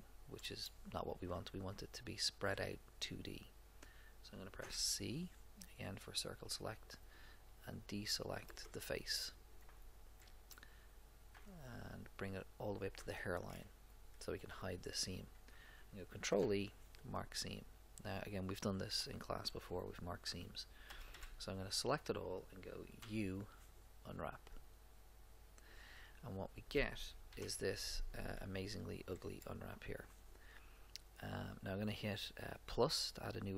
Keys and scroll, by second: 4.6 c, 11.3 c, 16.2 ctrl+e, 21.0 a, 23.0 u, 27.3 ctrl+Up.